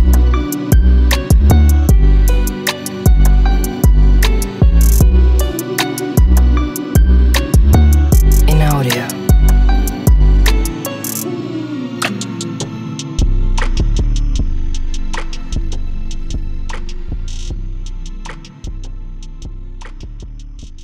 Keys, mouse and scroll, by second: 1.7 click, 1.9 s, 3.3 click, 5.8 click, 6.9 click, 7.3 s, 9.0 click, 9.2 click, 9.3 e, 10.0 click, 10.1 ctrl+z, 10.3 click, 10.5 s, 11.8 click, 13.0 z, 13.7 click, 15.3 Tab, 16.6 Tab, 17.8 click, 18.0-19.0 drag, 19.7-20.8 drag.